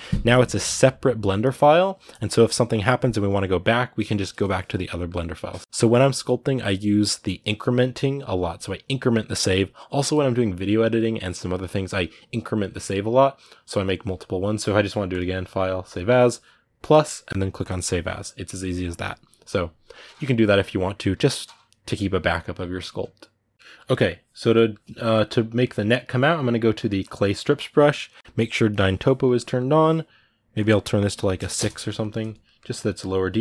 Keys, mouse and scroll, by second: 4.6-15.7 middle drag, 17.9 click, 18.7-26.8 middle drag, 26.8 click, 27.1-32.6 middle drag, 32.6 click.